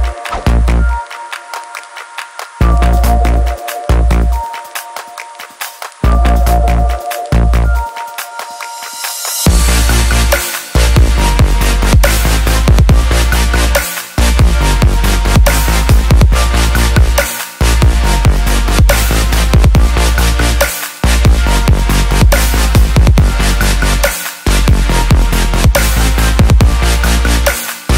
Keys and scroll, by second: 23.6-24.8 typing, 27.2 BackSpace, 27.4 BackSpace.